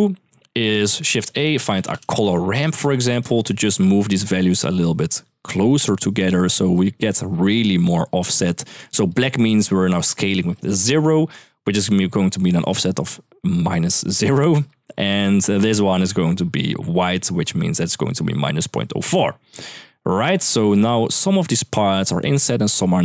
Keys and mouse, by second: 0.1 click, 0.5 middle click, 0.8 shift+a, 1.9 r, 2.9 click, 3.3 middle click, 3.9-4.9 drag, 5.4-7.4 drag, 8.9 click, 11.7 middle click, 14.3 middle click, 16.6 click, 17.2 middle drag, 19.9 middle drag, 20.4 shift+middle drag, 21.8-23.0 drag.